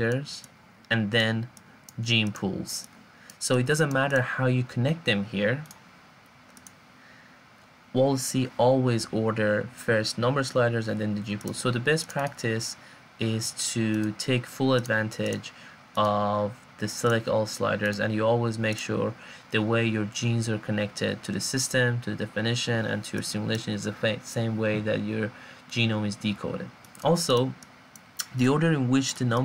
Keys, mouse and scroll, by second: 1.6-2.7 drag.